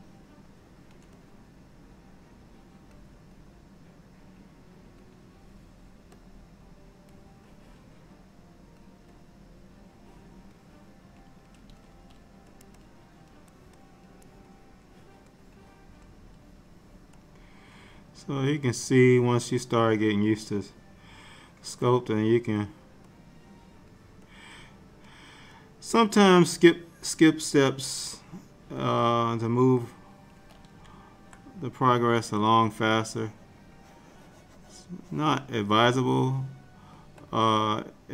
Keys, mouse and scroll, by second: 1.0 shift+click, 1.3 click, 3.5 click, 6.3 click, 7.6 click, 9.3 click, 12.0 f, 12.9 click, 13.9 click, 14.6 click, 15.9 click, 17.3 click, 19.8 click, 22.0 click, 23.2 click, 24.4 click, 25.7 click, 29.1 click, 31.8 click, 32.8 shift+click, 36.2 shift+click, 37.5 click.